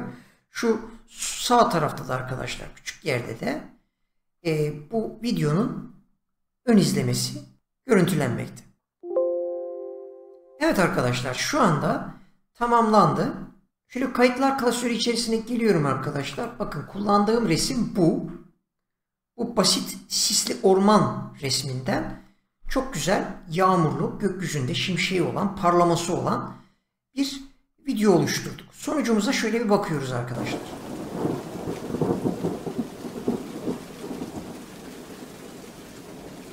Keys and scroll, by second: 17.5 Return.